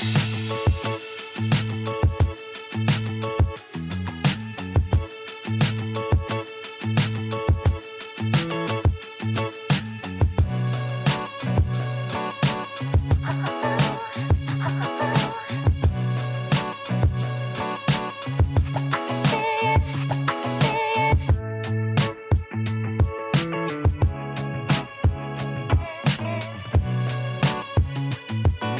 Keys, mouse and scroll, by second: 0.9-1.3 scroll up 2, 1.3 click, 2.2 shift+click, 4.2 ctrl+j, 5.7 drag, 6.1-6.9 scroll down 7, 6.9-9.0 middle drag, 9.0 KP_1, 10.4-11.2 scroll up 4, 11.2 click, 12.4-12.8 scroll up 2, 13.3-14.6 shift+middle drag, 14.6-15.7 scroll down 7, 15.7 click, 16.9 click, 17.1-18.6 scroll down 1, 18.6 click, 19.3-22.9 scroll up 9, 23.1-24.4 scroll down 2, 25.4 shift+a.